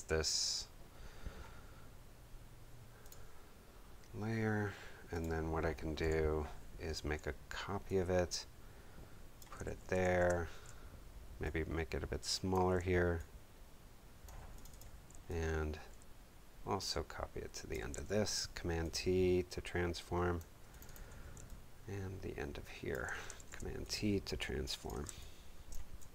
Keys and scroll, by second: 5.9 Delete, 9.9 alt+super+t, 18.0 alt+super+t, 18.8 super+t, 23.3 alt+super+t, 24.0 super+t, 25.0 space, 25.6 super+space.